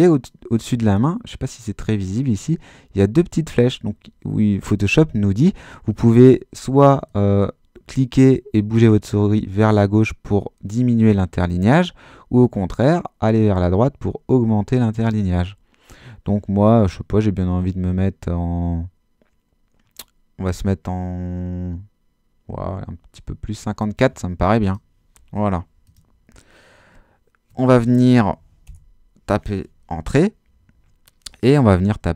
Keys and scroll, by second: 28.6 Return.